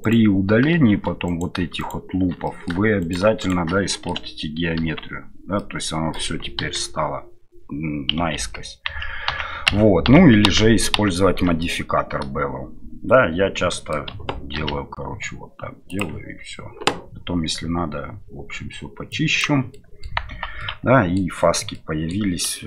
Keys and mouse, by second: 1.2 alt+right click, 1.8 alt+shift+right click, 2.4 middle click, 3.0 alt+shift+right click, 3.4 alt+shift+right click, 3.9-4.9 ctrl+middle drag, 4.8 ctrl+x, 5.6 middle click, 6.6 KP_1, 8.4 ctrl+z, 10.9 ctrl+z, 11.6-12.8 middle drag, 13.1 middle click, 14.5 ctrl+b, 19.1 click, 19.7 middle click, 20.3 Tab, 20.6-21.1 middle drag, 21.7-22.1 middle drag, 22.5 shift+middle drag.